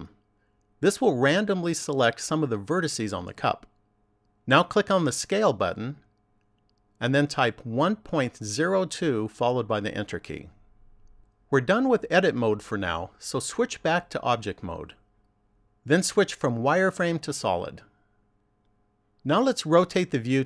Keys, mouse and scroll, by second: 5.5 click, 13.2 click, 15.3 click, 16.6 click, 18.5 click.